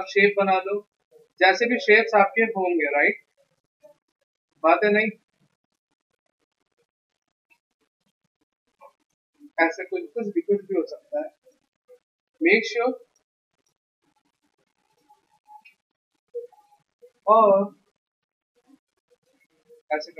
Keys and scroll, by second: 9.8 v, 11.9 x, 14.3 t, 16.1 Escape, 16.7 ctrl+t.